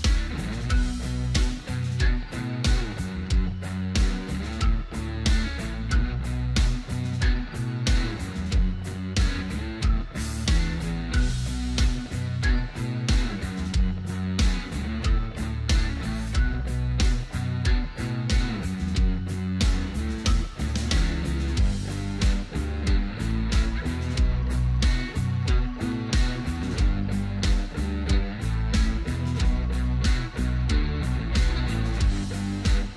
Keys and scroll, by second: 6.8 ctrl+f, 10.3 ctrl+alt+space, 28.6 ctrl+x.